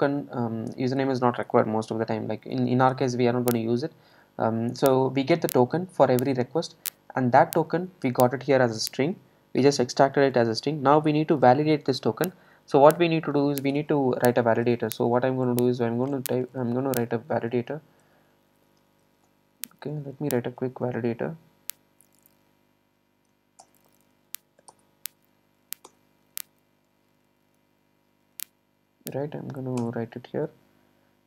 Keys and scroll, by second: 20.6 Escape, 24.7 super+Return.